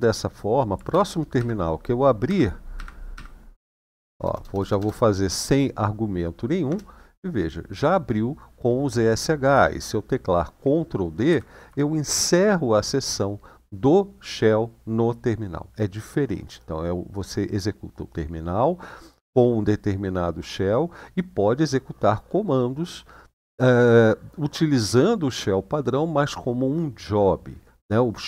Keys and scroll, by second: 0.4-4.8 typing, 6.1-6.9 typing, 11.0 ctrl+d.